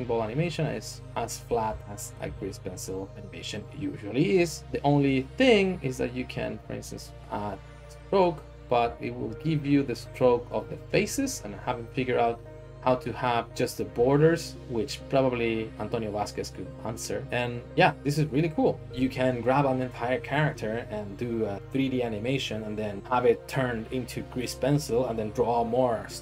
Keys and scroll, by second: 1.8 Tab, 2.2 Escape.